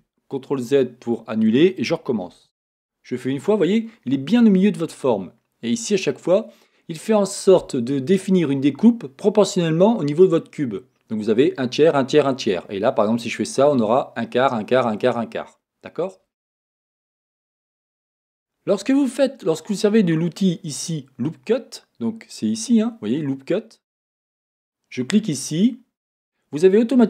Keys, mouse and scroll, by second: 0.3 middle click, 2.3 ctrl+r, 24.5-27.0 drag.